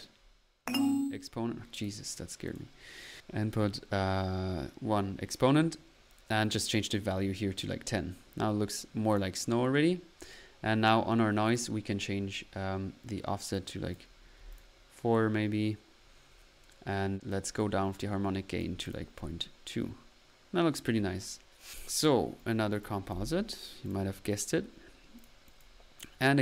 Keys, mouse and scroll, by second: 2.4 click, 6.5 click, 9.1 click, 13.5 click, 14.9 middle click, 15.9 middle click, 17.3 click, 18.8 click, 19.1 middle click, 21.7 click, 22.3-22.7 right drag, 22.8-23.6 typing.